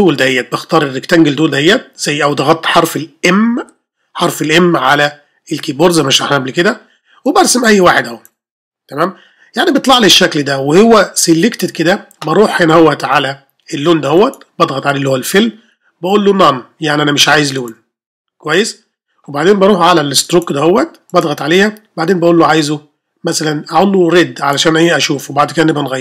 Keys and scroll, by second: 3.6 ة.